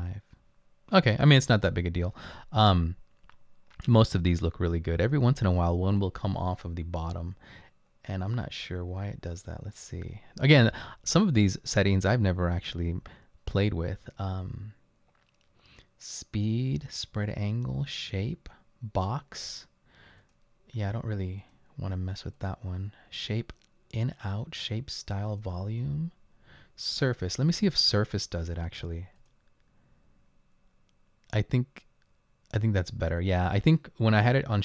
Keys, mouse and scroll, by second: 8.1-9.4 scroll down 4, 18.1-18.9 scroll down 2.